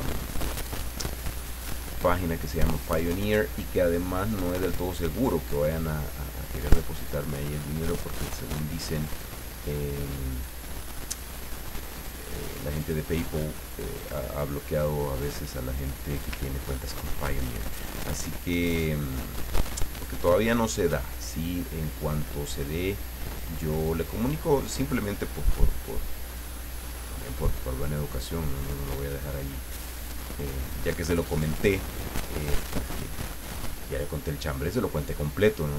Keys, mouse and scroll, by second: 0.0 click, 1.0 click, 2.8 click, 4.1 click, 6.9 click, 10.3 click, 11.1 click, 11.9 click, 12.8 click, 13.7 click, 15.7 click, 16.6-16.9 ctrl+scroll up 2, 17.1 ctrl+middle click, 18.4-21.5 drag, 23.8-26.6 drag, 27.2-31.6 drag, 31.8 middle click, 33.5-35.6 drag.